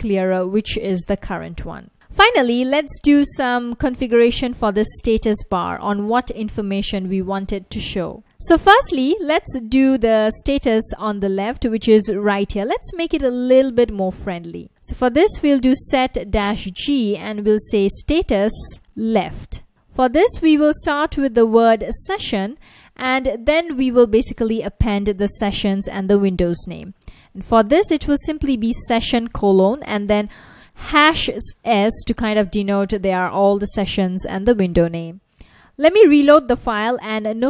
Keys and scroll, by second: 0.9 ctrl+a, 3.4 F1, 4.6 F1, 7.7 super+Tab, 8.2 Return, 10.2 super+Tab, 12.1 F1, 14.1 super+Tab, 14.6-22.6 typing, 24.9 shift+3, 26.8 s, 27.7 super+s, 29.1 F1, 34.8 super+Tab, 37.3 F1.